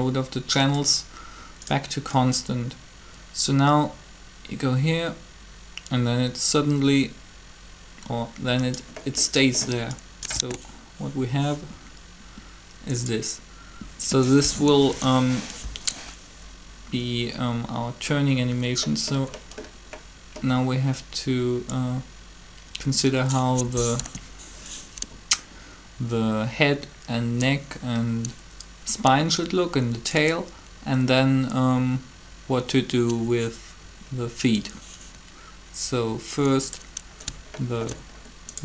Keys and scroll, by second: 10.3 alt+a, 14.7 7, 23.9 7.